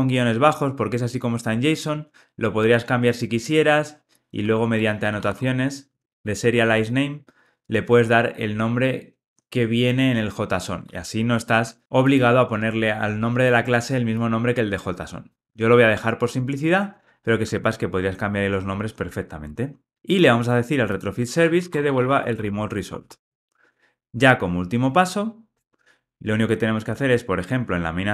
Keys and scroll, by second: 10.8 super+z, 23.2 Return.